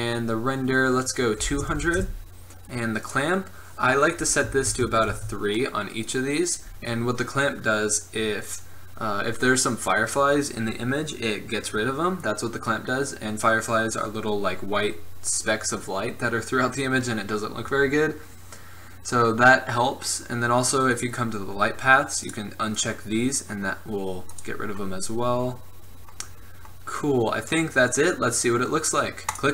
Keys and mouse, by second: 1.9 KP_0, 3.2-5.0 drag, 20.3-21.0 middle drag, 21.0-26.2 drag, 26.2-29.4 middle drag, 29.4 click.